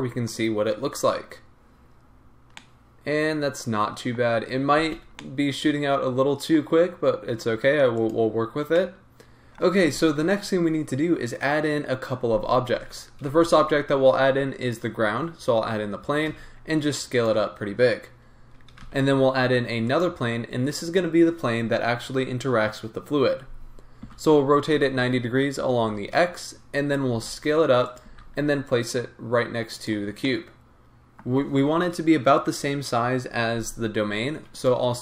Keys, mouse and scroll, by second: 4.9 space, 5.0-8.1 middle drag, 5.0 scroll down 2, 8.1 click, 8.7-20.0 middle drag, 14.7 shift+a, 16.2 s, 20.0 shift+a, 24.0 r, 27.1 s, 28.1 g, 30.2-34.6 middle drag, 34.6 click.